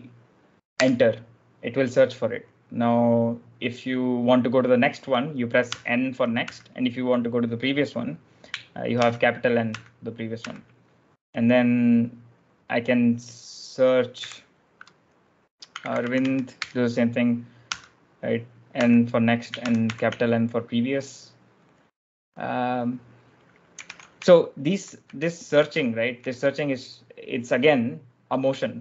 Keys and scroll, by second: 0.8 Return, 5.6 n, 6.3 n, 8.9 shift+n, 9.6 shift+n, 10.3 shift+n, 14.1 /, 15.3-17.6 typing, 18.7 n, 19.5 shift+n, 22.7-26.1 typing.